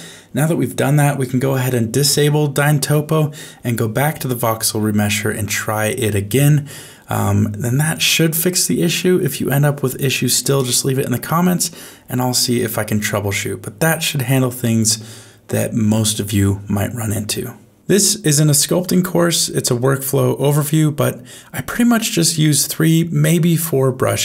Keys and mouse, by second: 0.2 click, 0.9 middle click, 1.8 alt+f, 2.8 Tab, 4.2 click, 9.4 click, 10.8 alt+a, 11.3 shift+middle click, 12.0 middle click, 18.0 shift+middle click, 18.5 middle click, 19.0 middle click, 20.1 shift+middle click, 20.7 middle click, 22.5 shift+space.